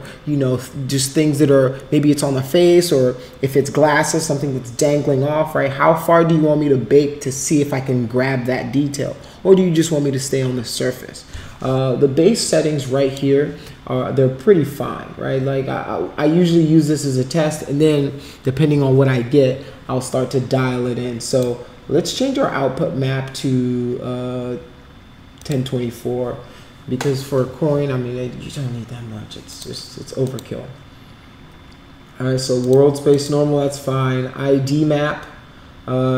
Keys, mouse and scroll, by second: 12.5-13.1 drag, 21.3 click, 25.3 click, 29.5 click, 30.2 click, 32.6 click, 33.1 click.